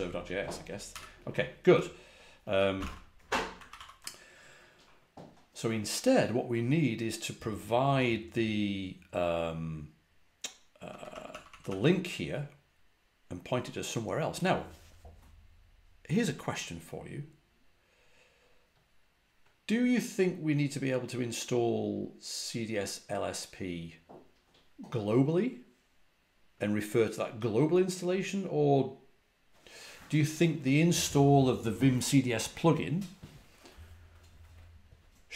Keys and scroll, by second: 0.8 typing, 2.4-3.2 typing, 3.6 ctrl+a, 3.6 ctrl+l, 10.8-11.6 typing.